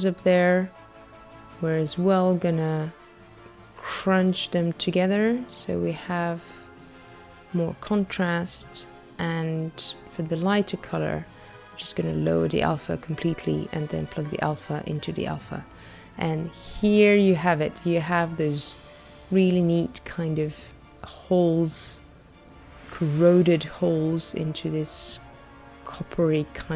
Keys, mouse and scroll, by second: 2.7 click, 5.9 click, 10.4 click, 13.0 click, 15.5 middle click, 16.7-17.1 scroll up 3, 17.6 middle click, 20.2-21.3 scroll down 5, 21.3 middle click, 22.8-24.7 scroll down 8, 24.7 middle click, 26.3 click.